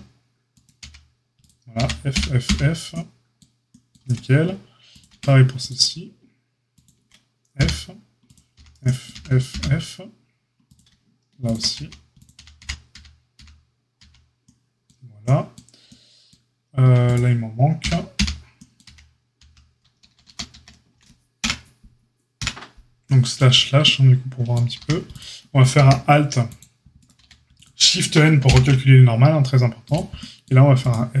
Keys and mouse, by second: 0.7 f, 1.3 click, 1.4-8.2 middle drag, 1.7 f, 2.1 f, 2.4 f, 4.0 Tab, 5.0 Tab, 7.5 f, 8.2 click, 8.3-10.7 middle drag, 8.5 f, 9.1 f, 9.4 f, 10.7 drag, 10.8-17.0 shift+middle drag, 11.7-13.9 typing, 17.0 click, 17.1-29.8 middle drag, 17.7 f, 18.1 f, 18.8 f, 19.3 f, 20.0 ctrl+z, 20.2 ctrl+z, 20.5 ctrl+z, 21.3 KP_Divide, 22.3 KP_Divide, 24.7 a, 25.7 a, 27.1 a, 28.4 shift+n, 29.8 click, 29.9-30.8 middle drag, 30.8 click, 30.8-31.2 middle drag.